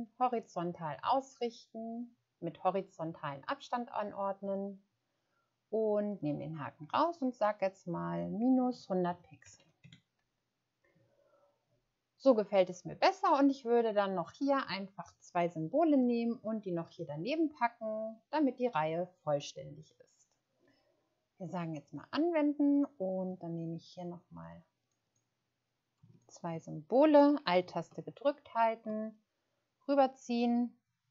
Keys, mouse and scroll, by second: 9.4 typing, 9.8 Return, 25.0 click.